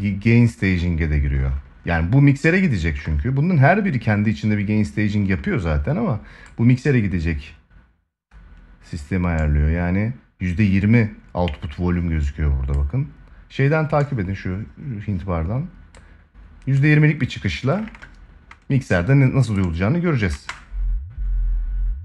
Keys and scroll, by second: 20.0 space, 21.8 space.